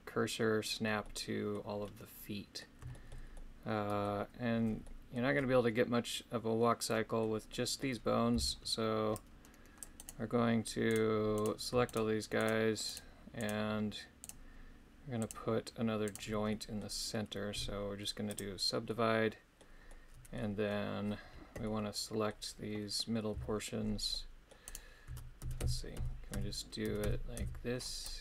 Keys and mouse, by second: 1.1 middle click, 1.8 middle click, 3.0 shift+middle click, 3.3 middle click, 4.9 middle click, 6.6 middle click, 7.5 middle click, 8.3 c, 10.0 right click, 10.9 right click, 11.4 right click, 11.9 shift+right click, 12.4 shift+right click, 13.4 shift+right click, 14.2 shift+right click, 15.2 shift+right click, 16.0 shift+right click, 16.5 middle click, 17.6 w, 18.9 middle click, 19.9 middle click, 21.6 middle click, 23.3 c, 24.7 right click, 25.1-27.4 typing.